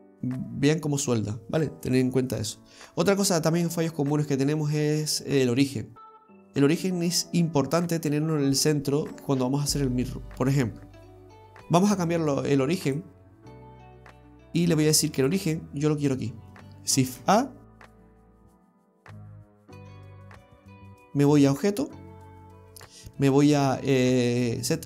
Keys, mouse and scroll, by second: 2.9 scroll up 2, 3.2-3.7 scroll down 1, 3.7 middle click, 4.5-6.4 scroll up 2, 11.1-11.7 scroll down 2, 12.9 click, 15.2 click, 17.1 shift+a, 21.5 click.